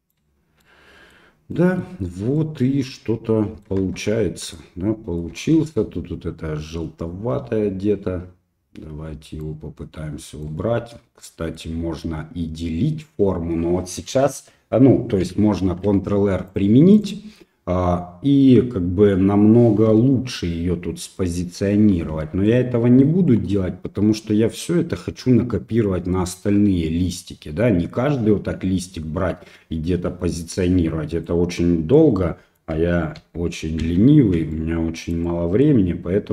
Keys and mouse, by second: 0.6 middle click, 1.5 middle click, 2.4-3.7 middle drag, 3.8 Tab, 4.5 middle click, 5.3 Tab, 9.4-10.4 right drag, 11.3 middle click, 15.7 ctrl+r, 19.9 l, 22.5 middle click, 23.3 middle click, 30.4 middle click, 31.9 middle click, 33.2 ctrl+z, 33.8 ctrl+z, 34.5 middle click, 35.3 middle click.